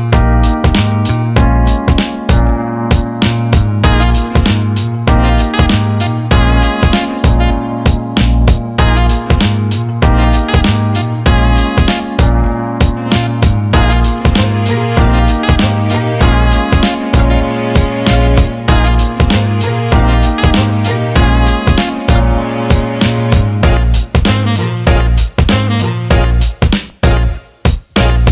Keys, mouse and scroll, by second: 0.7-1.8 drag, 3.9 click, 5.6-6.9 alt+middle drag, 7.4 alt+shift+middle click, 7.7 alt+middle click, 8.5 Tab, 9.1 alt+shift+middle click, 10.3 click, 10.8 alt+middle click, 11.5-12.6 alt+middle drag, 13.7 alt+middle click, 14.7 click, 15.9 click, 16.2 alt+middle click, 16.8 click, 17.5 alt+middle click, 23.1 alt+middle click, 24.5-25.0 drag, 25.5 alt+middle drag, 25.8 alt+shift+middle click, 25.9 alt+shift+click, 26.1 alt+drag, 27.3 alt+shift+drag, 28.0 click.